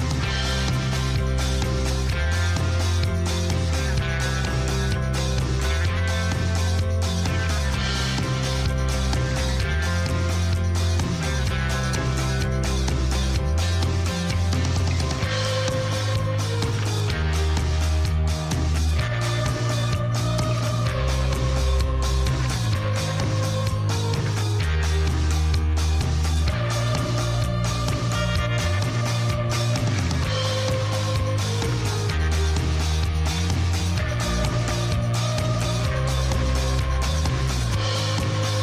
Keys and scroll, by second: 2.0 s, 2.4 0, 2.9 Return, 3.6 g, 3.8 z, 6.6 Tab, 14.3 Tab, 20.1 Tab, 23.3 /, 25.6 alt+a.